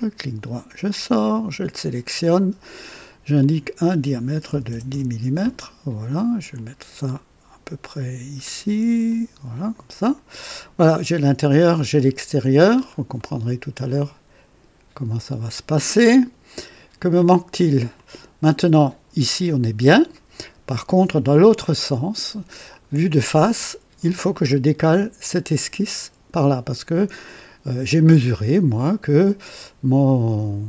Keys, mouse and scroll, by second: 1.2 click, 3.3 click, 4.4 KP_1, 4.5 KP_1, 4.6 KP_0, 4.7 KP_0, 4.8 KP_Enter, 4.9 KP_Enter, 6.5-8.5 drag, 9.0 click, 10.0 click, 12.2 scroll up 2, 12.7 scroll down 2, 13.1 right click, 17.9 click, 20.1 right click, 22.6 click.